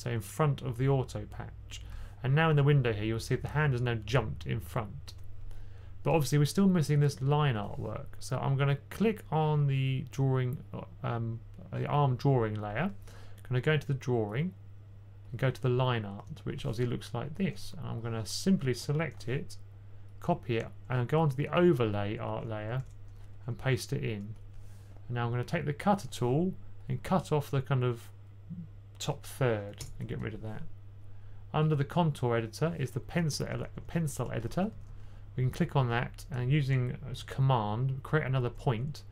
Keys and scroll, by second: 19.1 super+c, 22.6 super+v, 23.2-23.5 typing, 33.4-35.1 typing.